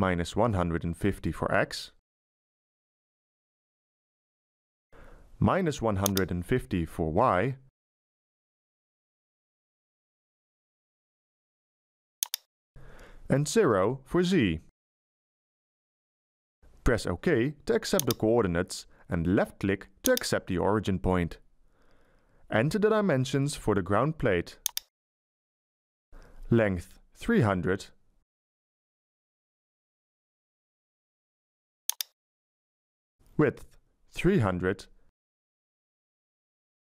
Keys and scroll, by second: 6.6 BackSpace, 8.4 -, 9.0 1, 9.5 5, 10.0 0, 12.7 BackSpace, 14.4 0, 25.2 BackSpace, 27.3 3, 27.8 0, 28.2 0, 32.5 BackSpace, 34.9-36.2 typing.